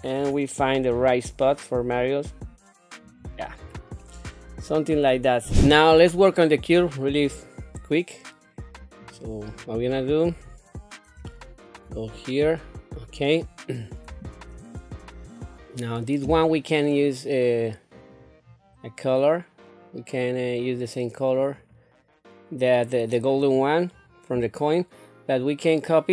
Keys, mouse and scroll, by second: 0.9 g, 3.6 scroll down 1, 4.0-5.1 middle drag, 9.0 click, 10.2 scroll down 2, 11.2 shift+middle click, 11.9-13.3 middle drag, 13.7 scroll up 2, 14.3 shift+middle click, 17.9 click, 21.3 click, 23.5 click.